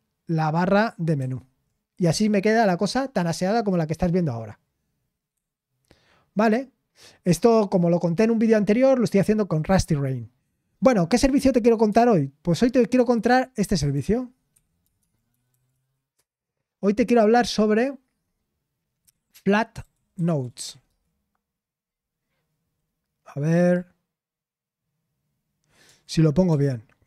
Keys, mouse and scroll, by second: 1.1 super+m, 12.9 super+0, 13.7 typing, 14.5 Escape, 14.9 alt+space, 15.2-16.2 typing, 19.2-21.1 typing, 22.2 typing.